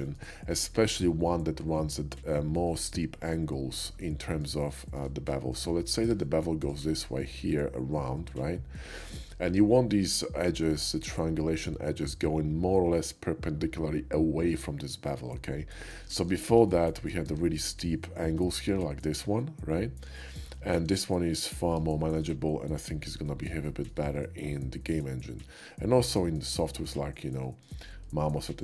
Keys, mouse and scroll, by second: 0.1 shift+middle click, 0.7 shift+middle click, 4.0 middle click, 4.2 shift+middle click, 4.8 shift+middle click, 5.1 middle click, 5.3 middle click, 5.4 middle click, 6.1 Tab, 6.6 click, 9.1 shift+middle click, 9.5 Tab, 10.1-13.5 drag, 15.8 middle click, 18.6 ctrl+z, 20.7 ctrl+shift+z, 21.0 ctrl+shift+z, 22.0 middle click, 22.7 middle click, 23.7 shift+middle click, 24.2 shift+middle click, 25.3 shift+middle click, 25.8 shift+middle click, 26.7 shift+middle click, 27.4 shift+middle click, 28.3 shift+middle click.